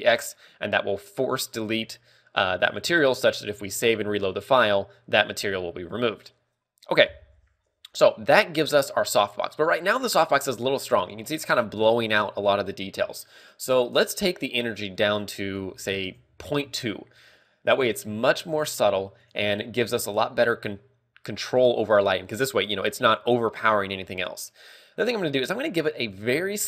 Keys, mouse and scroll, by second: 3.9 ctrl+w, 8.4 scroll down 2, 8.8 shift+middle click, 10.5 right click, 16.6 ctrl+click, 22.2 click, 26.4 click.